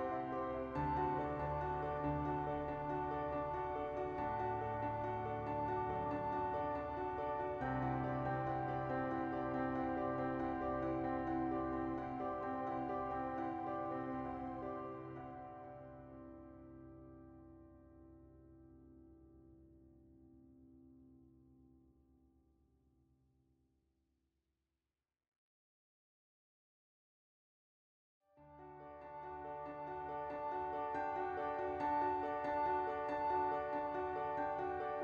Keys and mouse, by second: 0.5 Tab, 1.2 Tab, 2.0 Tab, 2.4 Tab, 3.0 Tab, 3.1 Tab, 3.7 a, 3.9 right click, 6.1 right click, 7.1 Tab, 7.5 middle click, 7.6 Tab, 7.8 middle click, 8.4 Tab, 8.6 middle click, 9.4 KP_1, 10.0 shift+middle click, 10.3 Tab, 10.8 3, 11.7 middle click, 12.7 2, 13.9 e, 14.1 s, 15.0 KP_1, 15.4 ctrl+z, 16.0 middle click, 16.2 e, 16.3 s, 16.8 right click, 17.3 right click, 18.3 KP_1, 18.6 KP_7, 19.5 click, 20.6 click, 21.4 click, 22.9 Tab, 23.0 middle click, 23.5 KP_1, 23.8 shift+middle click, 24.0 Tab, 24.4 alt+middle click, 25.0 ctrl+b, 26.9 Tab, 27.8 middle click, 28.7 KP_1, 28.9 Tab, 29.6 3, 29.8 middle click, 31.0 alt+middle click, 31.4 middle click, 31.8 KP_1, 33.1-34.5 drag.